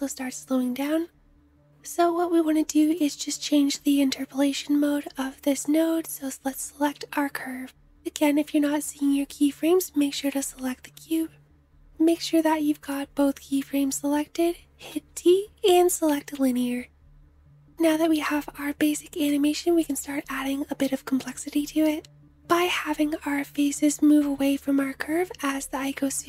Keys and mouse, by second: 0.7 space, 1.7 click, 2.7 middle click, 2.9-10.0 drag, 10.0-11.9 middle drag, 11.9 a, 12.3-14.6 drag, 14.6 t, 17.3-20.9 middle drag, 20.9 shift+click, 21.8-26.2 drag.